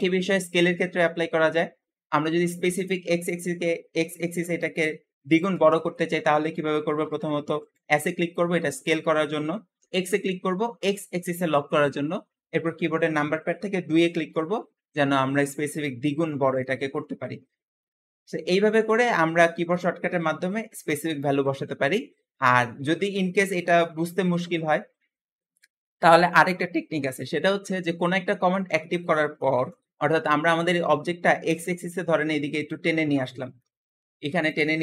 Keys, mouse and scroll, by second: 6.9 g, 21.3 alt+s, 28.6-31.6 middle drag, 31.6 click, 34.7-34.8 shift+middle drag.